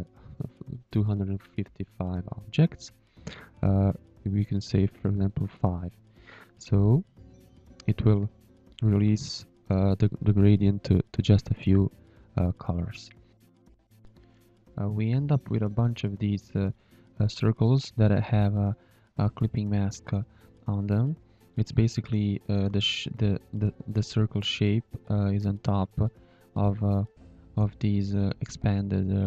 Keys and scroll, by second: 5.7 5, 8.0 5, 8.9 z, 9.9 space, 12.1 space, 14.4 shift+a, 15.2 ctrl+h, 16.9 ctrl+h, 17.9 z, 18.3 v, 18.6 ctrl+y, 19.2 space, 20.4 v, 23.5 v, 24.4 ctrl+y, 24.7 space, 25.5 shift+a, 26.5 shift+a, 29.0 v.